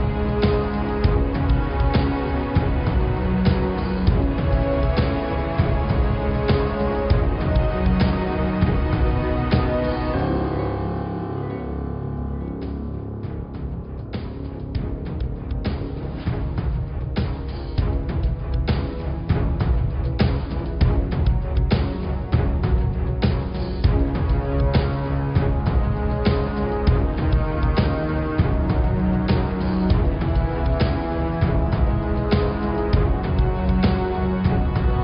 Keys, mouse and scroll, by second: 0.5 alt+click, 1.2 alt+click, 4.5 click, 5.3 click, 6.3 x, 9.3 middle click, 9.8 ctrl+z, 10.7 click, 11.1 middle click, 11.8 click, 12.7 x, 14.3 middle click, 14.9 click, 17.2 click, 18.9 click, 21.2 click, 22.1 click, 22.6 click, 23.2 click, 23.9 click, 24.4-27.1 middle drag, 27.1 click, 29.0 click, 29.4 g, 31.0 g, 33.8 click, 34.7 alt+click.